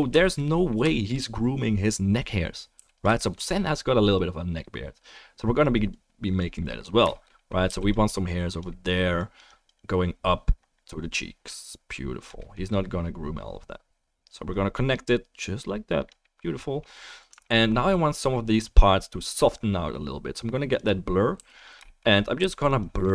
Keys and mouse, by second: 2.7 f, 3.0-4.1 shift+drag, 7.7 f, 7.9 click, 12.4-15.2 middle drag, 15.2 click, 15.3 middle click, 16.2-17.5 middle drag, 20.6-21.6 middle drag, 21.3 f, 21.6-22.8 shift+right drag, 22.4 f.